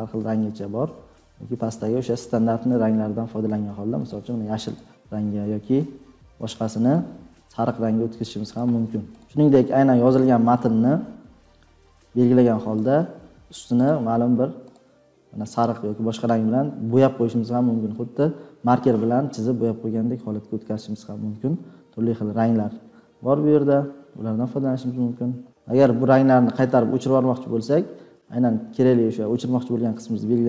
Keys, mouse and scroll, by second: 4.1 scroll, 4.7 scroll, 6.8 scroll, 7.3 click, 9.1 scroll, 25.4 click.